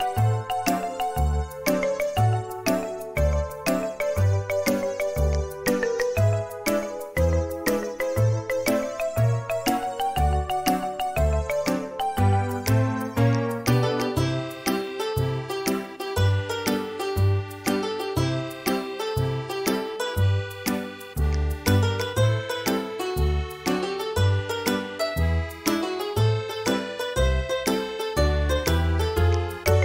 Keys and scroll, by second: 1.5 typing, 7.1 e, 8.5 e, 13.1 space.